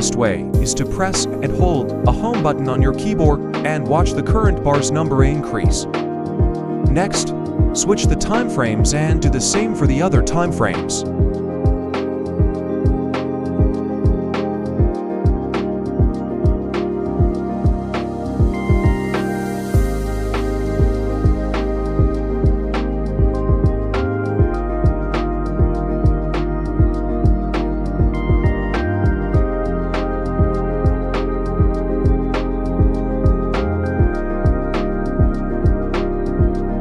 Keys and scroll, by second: 11.9 Home, 30.5 Home.